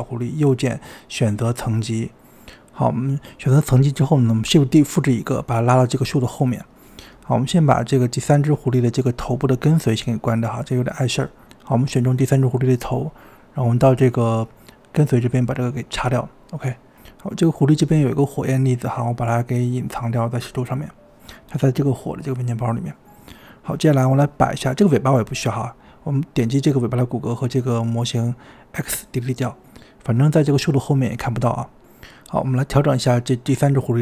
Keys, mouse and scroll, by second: 0.4-2.8 right drag, 2.8-3.7 shift+middle drag, 3.7 KP_7, 3.8-5.1 scroll down 5, 5.1 scroll down 1, 5.3 shift+d, 8.1 r, 9.0 g, 10.1-10.8 scroll up 6, 11.6 click, 14.2 click, 15.8-17.2 drag, 17.2 scroll up 1, 17.4 click, 17.6-18.2 middle drag, 18.4 click, 19.3 click, 20.5-22.1 scroll down 3, 22.1-22.4 drag, 23.7 click, 26.5 shift+click, 28.5 x, 30.2 click, 31.1-32.1 middle drag, 32.1-34.0 typing, 33.0-33.8 scroll down 5, 33.2 shift+middle drag.